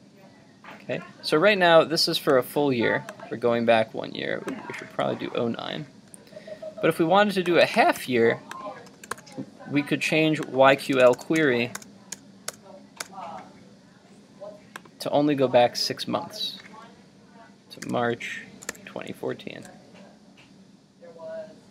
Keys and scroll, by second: 8.0 super+c, 9.2 super+v.